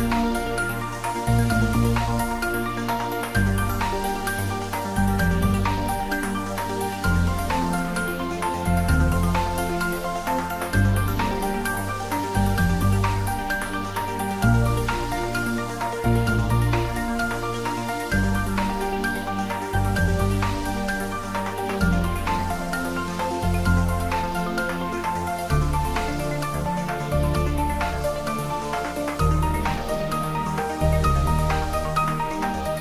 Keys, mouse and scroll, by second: 0.6 click, 6.7 click, 11.4 click, 18.9 click, 23.8 click.